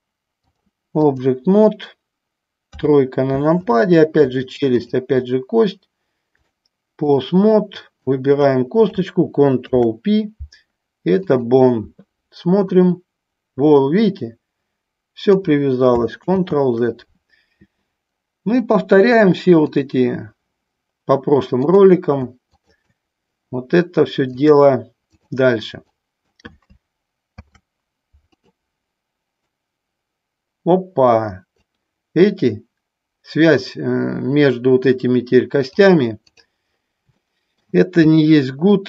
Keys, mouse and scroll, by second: 0.7 click, 2.9 KP_3, 3.8 click, 6.5 click, 8.3 click, 9.8 ctrl+p, 12.9-15.4 drag, 16.4 ctrl+z, 18.9-20.0 drag, 21.6 click, 22.6 shift+click, 24.5 click, 26.1 click, 27.5 ctrl+p, 29.6-31.9 drag, 35.9 click, 37.4 shift+middle click, 38.2 click.